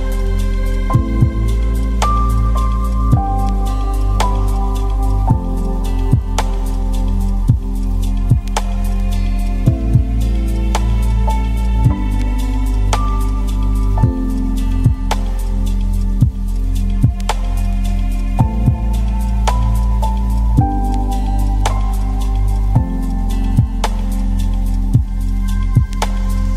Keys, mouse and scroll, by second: 0.3 middle click, 0.8 KP_0, 1.5 click, 2.0 KP_0, 2.2 click, 3.1 middle click, 3.3-3.9 scroll up 3, 3.9 click, 4.0 Tab, 4.1 Tab, 4.5 click, 5.1 middle click, 5.3-6.9 ctrl+drag, 6.9 middle click, 7.1 ctrl+click, 7.7 KP_0, 8.0 KP_0, 8.2 ctrl+click, 9.1 middle click, 9.2 scroll up 4, 9.4 ctrl+click, 9.7 shift+middle click, 10.0 ctrl+click, 10.7 scroll down 3, 10.7 middle click, 11.2 ctrl+click, 11.7 middle click, 11.9 ctrl+click, 12.0 scroll up 1, 12.1 middle click, 12.2 ctrl+click, 12.6 middle click, 12.9 scroll up 1, 13.0-15.1 ctrl+drag, 15.1 middle click, 15.2 ctrl+click, 15.6 shift+middle click, 15.7 scroll up 1, 15.8 ctrl+click, 16.7 scroll down 2, 16.9 click, 17.5 scroll up 1, 17.7 ctrl+click, 18.4 scroll down 4, 18.5 middle click, 18.6 scroll up 3, 18.8 ctrl+click, 19.6 middle click, 19.8 ctrl+click, 20.3 shift+middle click, 20.5 scroll up 3, 20.6 click, 20.9 scroll down 2, 21.0 middle click, 21.2-22.5 ctrl+drag, 22.5 KP_0, 23.3 click, 26.3 click.